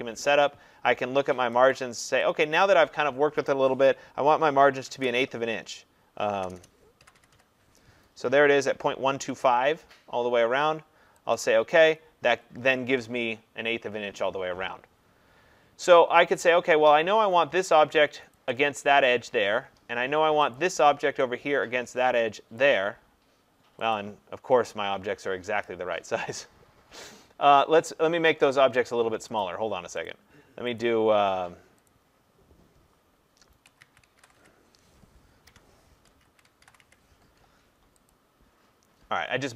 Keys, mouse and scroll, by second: 2.6 click, 4.5-5.0 typing, 6.4-7.8 typing, 9.5 click, 11.4 click, 18.4 click, 20.6 click, 24.0 click, 29.4 click, 30.1 click, 30.8 click, 31.9 click, 33.7-34.4 typing, 35.5 Tab, 36.1-37.3 typing, 38.1 click.